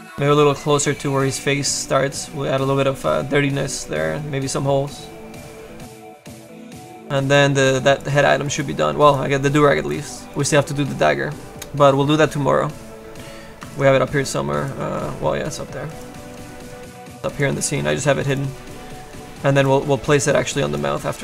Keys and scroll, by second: 16.4 space, 17.8 f, 20.4 space.